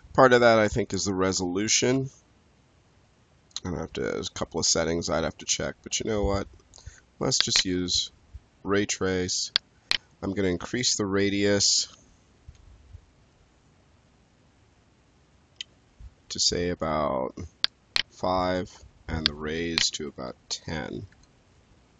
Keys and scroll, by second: 12.4 3, 18.0 5, 20.1 1, 20.5 0, 21.0 Return.